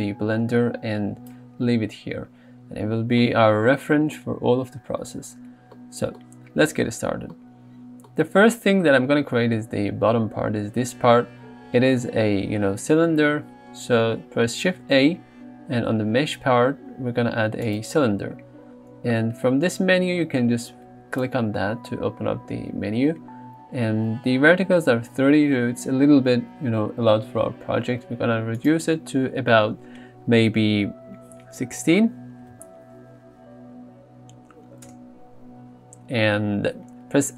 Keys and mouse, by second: 5.8 middle click, 15.0 shift+a, 21.2 click.